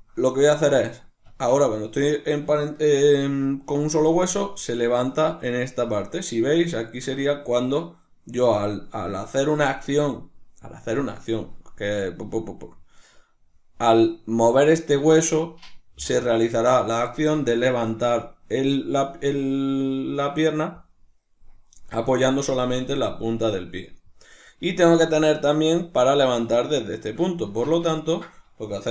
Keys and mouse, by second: 1.3 Tab, 2.1 right click, 4.1 r, 5.9 right click, 6.7-24.5 ctrl+middle drag, 24.5 right click, 27.5 Tab, 28.0-28.9 ctrl+middle drag.